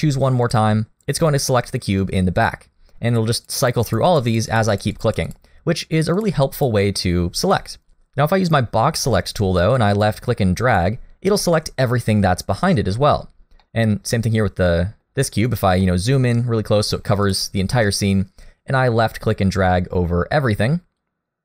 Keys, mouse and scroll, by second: 0.5 click, 2.4 click, 3.1 click, 3.4 click, 3.6 click, 3.8 click, 4.1 click, 4.3 click, 4.5 click, 4.7 click, 5.0 click, 5.3 click, 6.2 click, 6.5 click, 9.8 click, 11.4 middle click, 13.3-14.0 scroll down 2, 13.6 middle click, 15.5-15.8 scroll up 1, 15.8 middle click, 17.3 click, 17.5-17.9 scroll up 1, 17.9 middle click, 21.0 click.